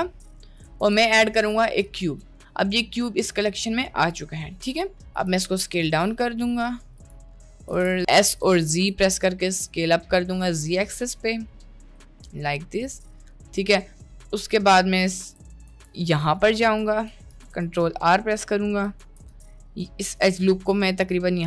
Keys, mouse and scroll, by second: 0.2-0.5 middle drag, 0.8 shift+a, 4.0 click, 4.8 shift+middle drag, 5.3 s, 7.8 s, 8.4 s, 10.6-11.4 middle drag, 11.9 click, 12.5-14.0 shift+middle drag, 14.2-14.6 shift+middle drag, 15.2 Tab, 15.7 Tab, 16.8 Tab, 17.4 ctrl+r, 19.2 ctrl+r.